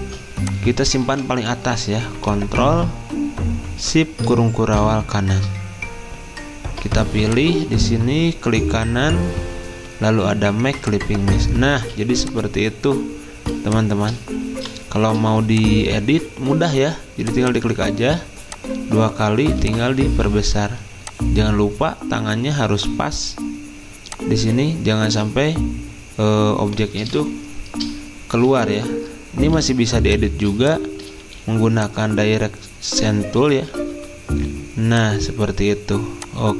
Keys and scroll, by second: 0.0 ctrl+z, 0.0 typing, 1.1 ctrl+z, 14.5 v, 30.6 z, 33.9 =.